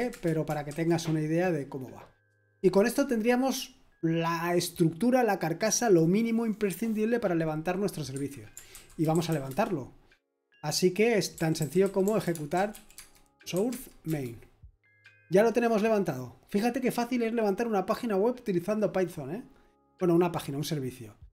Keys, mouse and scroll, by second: 0.0-0.7 typing, 0.1 Return, 8.7-9.8 typing, 11.1-14.0 typing.